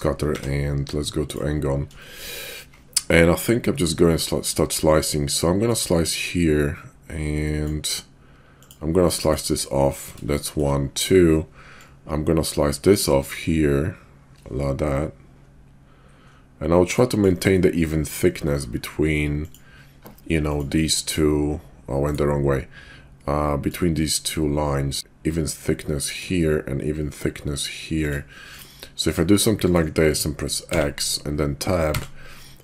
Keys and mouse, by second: 0.3 d, 2.0 shift+drag, 4.9-7.6 drag, 10.5 shift+click, 11.7-17.2 drag, 23.6-26.2 drag.